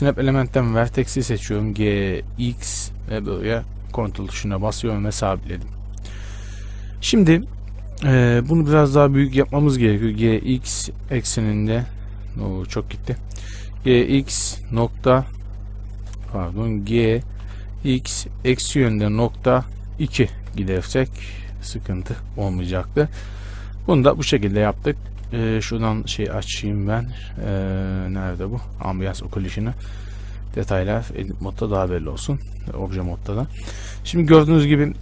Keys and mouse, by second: 1.9 g, 6.4 z, 9.8-13.6 middle drag, 10.4 g, 17.6 g, 23.0 Tab, 25.0 Tab, 25.5 n, 29.2-31.2 drag, 30.0 Tab, 30.6 Tab, 31.2 a, 32.2 Tab.